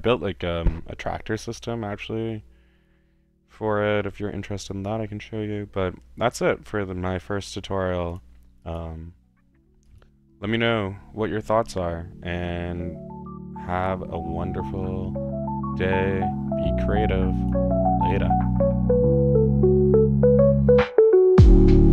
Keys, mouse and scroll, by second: 1.4-1.7 drag, 4.7 click, 5.1 click, 5.4-6.3 middle drag, 7.4-8.1 middle drag, 8.1 click, 8.6 click, 9.9 drag, 17.3 click, 19.1-19.6 drag, 19.9 drag, 20.4 drag.